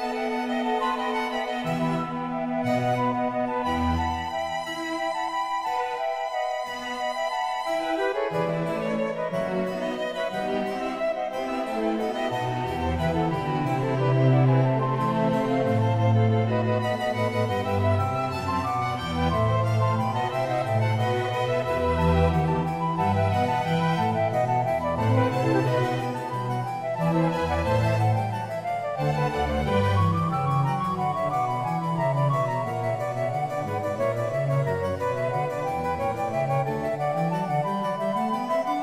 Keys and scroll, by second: 13.0 ctrl+z, 20.2 space.